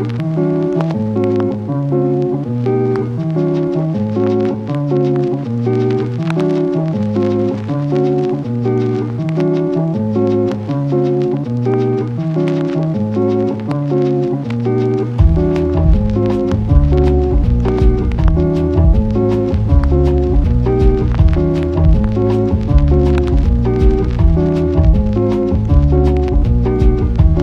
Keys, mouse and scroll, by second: 0.3 click, 0.8 click, 2.3 click, 2.6 ctrl+z, 3.8 click, 4.2 ctrl+z, 4.6 click, 4.8 ctrl+z, 5.2 ], 5.3 ], 5.4 ], 6.7 click, 7.6 click, 8.3 ], 8.5 ], 11.5 ctrl+z, 11.6 ctrl+z, 12.2 [, 12.6 ctrl+z, 12.6 click, 12.6 ], 14.4 click, 15.3 click, 16.3 click, 17.5-20.4 typing, 20.4 ctrl+z.